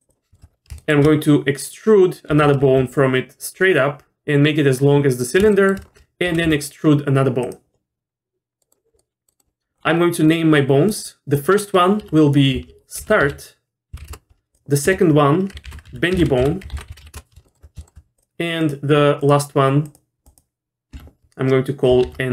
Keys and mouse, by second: 0.1 click, 0.3 shift+middle click, 0.8 shift+middle click, 2.3 e, 5.5 shift+middle click, 6.3 e, 8.6 middle click, 9.0 middle click, 10.9 click, 12.0 F2, 14.9 F2, 17.5 shift+middle click, 17.8 shift+middle click, 18.6 click, 19.2 click, 20.9 F2.